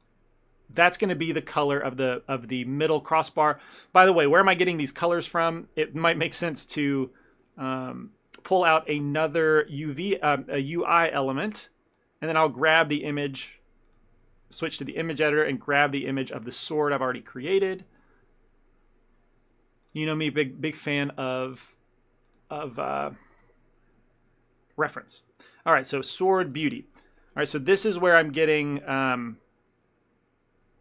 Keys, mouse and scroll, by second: 4.6 click, 9.0 click, 15.0 click, 26.2 click, 27.0 scroll down 1, 27.8 scroll up 2, 28.5 scroll down 1, 29.3 scroll up 2.